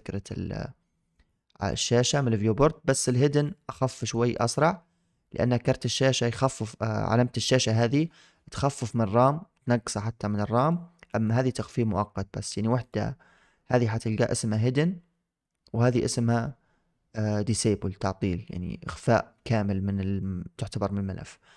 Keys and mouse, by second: 1.0 click, 1.5 click, 1.9 click, 2.3 click, 2.8 click, 3.2 click, 3.9 click, 4.2-5.7 drag, 10.5 click, 11.0 click, 12.7 click.